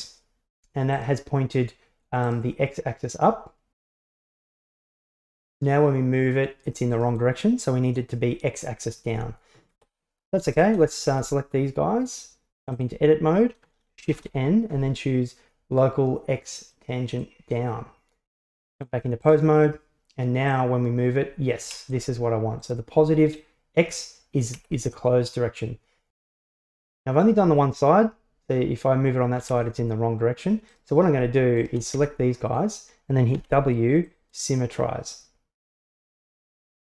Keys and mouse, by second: 1.0-2.4 right drag, 4.1 Tab, 5.6-7.2 drag, 9.1 Tab, 10.6 shift+right click, 11.2 Tab, 14.1 shift+n, 18.3 Tab, 19.3 right click, 20.6-22.0 drag, 22.6 right click, 23.4-24.9 drag, 27.1 right click, 27.7-29.6 drag, 30.8-31.2 right drag, 31.6 shift+right click, 32.0 Tab, 33.4 w, 36.6 Tab.